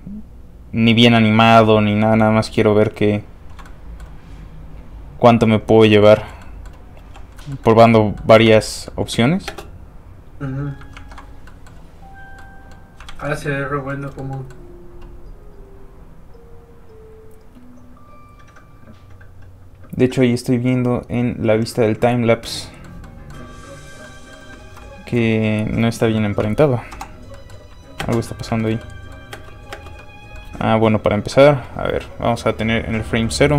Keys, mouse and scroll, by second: 1.2 middle click, 2.4 ctrl+click, 3.6 click, 3.7 middle click, 4.6 click, 5.8 middle click, 6.1 shift+middle click, 6.4 middle click, 6.5 middle click, 7.0 f, 7.1 click, 7.4 middle click, 8.1 scroll up 1, 8.2 middle click, 8.6-8.9 scroll down 1, 8.9 middle click, 9.4 space, 10.9 ctrl+Tab, 11.5 middle click, 11.6 middle click, 11.9 click, 12.4 middle click, 13.1 alt+shift+z, 13.2 shift+middle click, 13.3 middle click, 13.9 shift+middle click, 14.3 middle click, 14.4 middle click, 23.6-23.9 scroll up 1, 24.0 middle click, 24.6 alt+shift+z, 25.1 shift+z, 25.2 space, 26.1 scroll down 1, 26.2 middle click, 26.9 KP_Divide, 27.3 middle click, 27.6-28.0 scroll down 1, 28.0 space, 28.2 middle click, 28.4 shift+middle click, 28.7 shift+middle click, 30.0 middle click, 30.0 space, 30.5 space, 32.5 click.